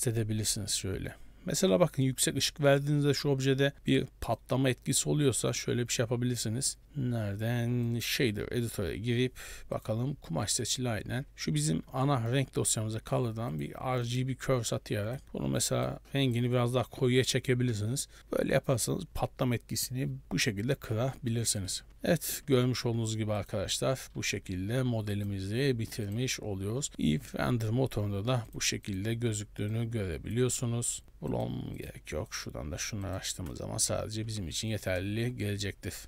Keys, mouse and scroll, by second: 1.8 middle click, 2.1 scroll up 1, 4.4 click, 5.6 click, 6.8 click, 8.4 n, 8.9 scroll up 5, 9.8 click, 10.5 middle click, 10.8-11.2 scroll up 2, 11.3 click, 12.1 shift+a, 14.8 click, 15.2 click, 15.7 click, 16.0 click, 16.9 scroll up 4, 17.6 a, 17.8 a, 21.1 scroll down 2, 21.4 middle click, 21.9 ctrl+space, 22.6 ctrl+space, 23.5 click, 24.2-25.2 scroll up 9, 25.2 click, 28.6 click, 28.9 click, 29.8 click, 31.0 click, 31.4 click, 31.9 click, 32.4 click, 33.1 click, 33.9 ctrl+space, 34.3-36.0 typing, 34.7 right click.